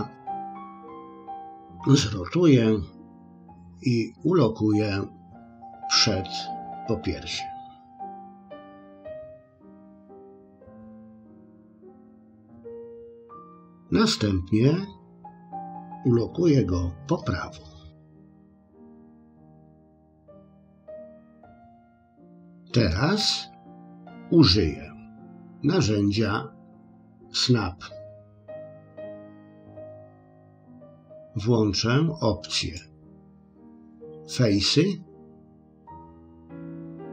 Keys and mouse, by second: 8.3 r, 10.1 g, 11.5 s, 12.4 KP_1, 19.0 g, 20.2 middle click, 21.5 click, 22.9 middle click, 28.8 click, 32.6-37.1 drag.